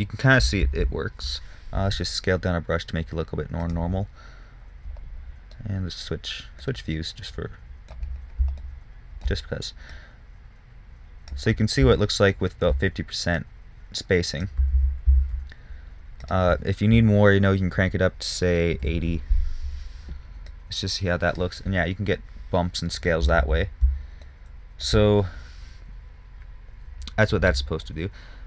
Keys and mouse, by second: 1.2 ctrl+z, 2.3 f, 10.3-12.0 drag, 12.0-12.5 middle drag, 13.7-18.6 drag, 15.2 ctrl+z, 15.5 ctrl+z, 20.8-22.6 drag, 22.6-23.1 middle drag, 23.8 ctrl+z.